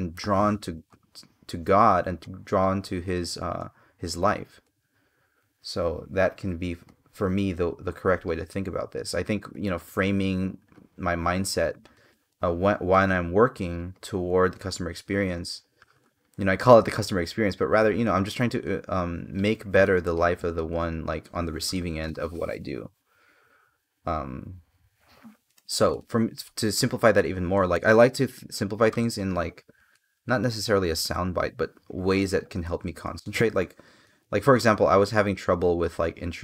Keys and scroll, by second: 25.1 space, 27.3 space, 29.6 space, 32.8 space.